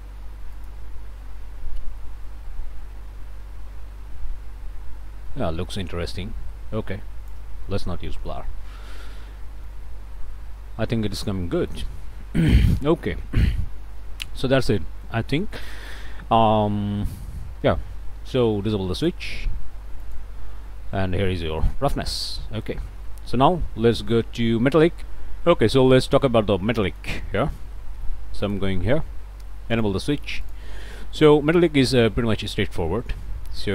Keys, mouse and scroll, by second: 0.5 click, 2.2-7.5 drag, 7.8 scroll up 2, 8.2-9.2 drag, 9.2 scroll up 2, 9.7-11.9 drag, 12.5 click, 14.0 click, 14.8 click, 19.0 click, 20.0 ctrl+shift+click, 21.0 scroll up 2, 21.4 click, 22.3-22.9 scroll up 3, 23.1-24.3 drag, 24.4 scroll up 1, 24.9 click, 26.4 scroll up 1, 26.9 click, 28.4 ctrl+shift+click, 29.7 click, 30.5 ctrl+shift+click, 31.1 ctrl+shift+click, 32.5-33.7 drag.